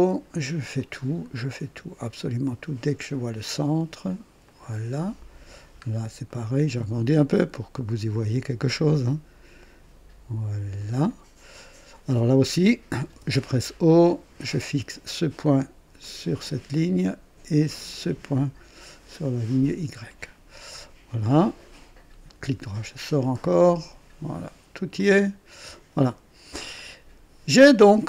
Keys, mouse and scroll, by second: 0.7 click, 2.9 click, 4.4 click, 5.7-6.0 scroll up 1, 6.3 right click, 8.1 click, 9.0 right click, 10.7 click, 11.6 right click, 13.1 o, 14.6 click, 16.0 click, 17.9 click, 19.2 click, 20.0-20.4 scroll down 1, 20.6 right click, 22.3 right click, 23.1 click, 24.9 click, 26.7 click, 27.7 right click.